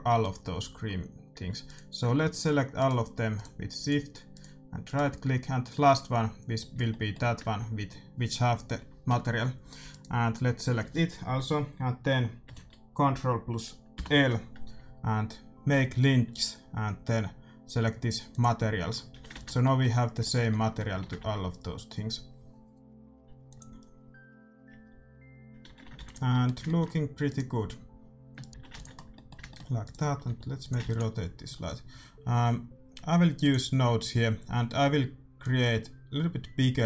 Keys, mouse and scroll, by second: 1.9-6.7 right drag, 6.8-10.3 middle drag, 10.3-11.8 right drag, 13.9 ctrl+l, 19.0-22.2 middle drag, 19.1 a, 19.3 ctrl+s, 22.2 shift+z, 23.5-25.3 drag, 25.8 shift+z, 25.9 ctrl+s, 26.2-27.6 middle drag, 27.6 right click, 28.5 shift+e, 28.5 a, 28.6 ctrl+s, 29.0 middle click, 29.8-31.7 right drag, 30.2 r, 30.8 ctrl+s, 33.3-35.2 drag, 35.3-36.8 drag.